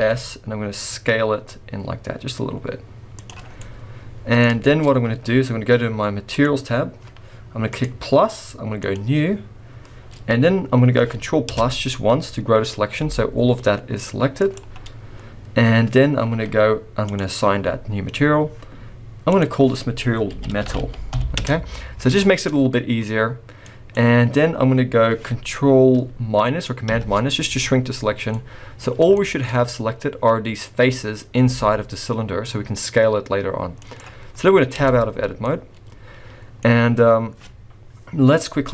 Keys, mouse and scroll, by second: 3.4-4.1 scroll down 3, 3.5 middle click, 4.6 shift+middle click, 4.8-6.3 scroll up 2, 6.3 click, 6.3 scroll up 1, 7.7 click, 8.8 click, 11.5 ctrl+KP_Add, 12.4-13.0 scroll down 2, 13.0 g, 14.8-15.4 scroll up 1, 17.1 click, 17.9-19.3 scroll up 1, 19.3 click, 23.6 middle click, 23.8 middle click, 23.9-26.0 scroll up 1, 26.8 ctrl+KP_Subtract, 28.2 scroll down 1, 28.3 middle click, 29.2 shift+middle click, 31.5 s, 34.8 Tab, 35.0-35.6 scroll down 4, 35.4 middle click, 36.5 middle click, 36.6-37.8 scroll up 1, 37.8 scroll up 1.